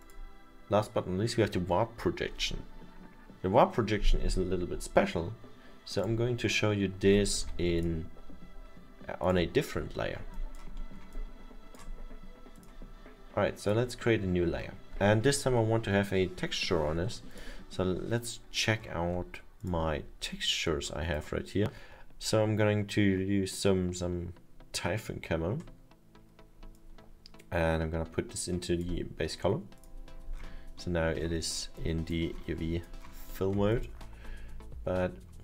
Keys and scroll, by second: 7.4 ctrl+z.